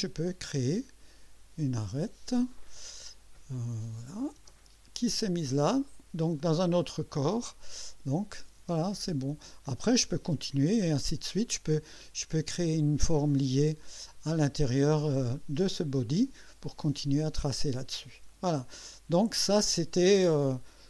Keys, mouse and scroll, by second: 0.5 click, 1.8 click, 4.1 click, 4.4 space, 8.2 click, 8.6 space, 10.8-11.5 drag, 11.9-12.5 drag.